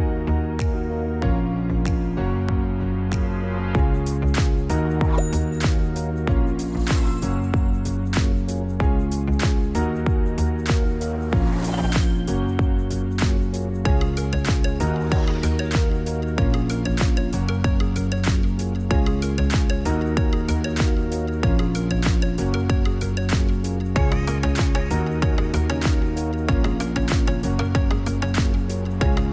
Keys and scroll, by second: 0.5 ctrl+f.